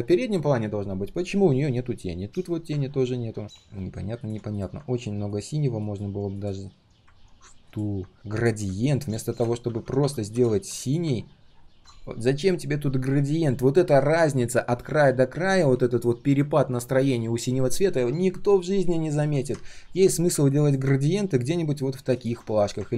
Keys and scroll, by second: 9.6 ctrl+z, 9.8 ctrl+z, 10.0 ctrl+z, 22.5 ctrl+alt+c.